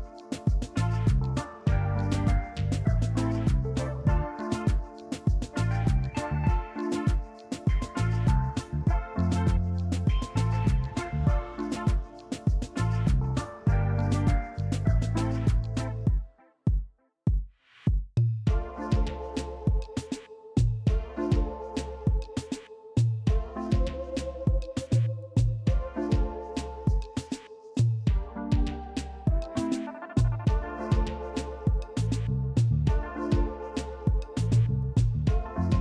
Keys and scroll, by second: 0.3 i, 1.7 Delete, 2.0 Delete, 2.8 f, 5.6 shift+r, 6.2 r, 11.3 2, 11.3 Return, 11.5 Tab, 11.6 BackSpace, 11.7 3, 13.4 ctrl+z, 14.7 a, 15.2 f, 21.2 Delete, 22.9 Delete, 32.8 f, 35.3 Delete.